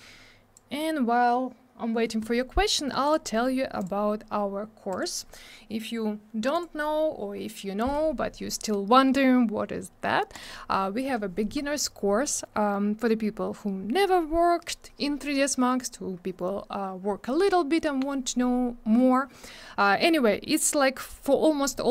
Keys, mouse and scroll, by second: 3.0 click, 3.1 click, 3.8 click, 3.8 click, 4.9 click, 5.0 click, 10.3 click, 15.2 scroll down 1.